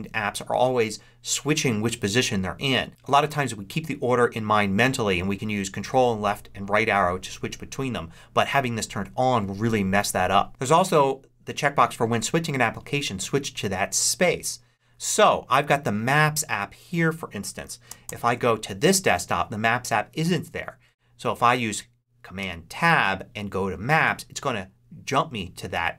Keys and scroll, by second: 17.9 ctrl+Right, 22.3 super+Tab.